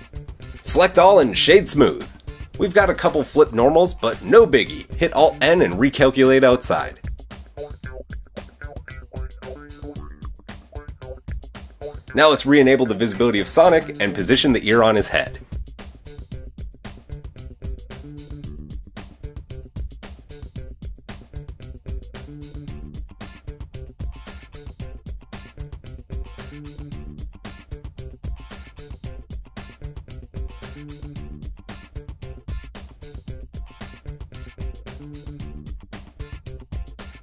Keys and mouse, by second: 0.0 Tab, 0.7 a, 1.9-3.7 drag, 4.2-12.3 alt+drag, 4.5 alt+n, 7.8 Tab, 12.3-13.2 middle drag, 13.2-14.5 drag, 14.5-16.1 middle drag, 16.1 click, 16.2 middle click, 17.2 click, 17.3-17.7 middle drag, 17.7 click, 18.5-19.5 middle drag, 19.2 g, 19.5 shift+click, 20.0 shift+middle click, 20.4 shift+middle click, 21.1-21.4 shift+middle drag, 21.6 shift+middle drag, 22.0 shift+middle drag, 23.1 r, 25.2-26.1 middle drag, 26.3 r, 27.9 r, 29.5-31.3 middle drag, 29.8 KP_1, 30.6 g, 32.0 g, 32.7-33.1 shift+middle drag, 33.3 KP_1, 33.6 shift+middle drag, 34.1 r, 35.9 r.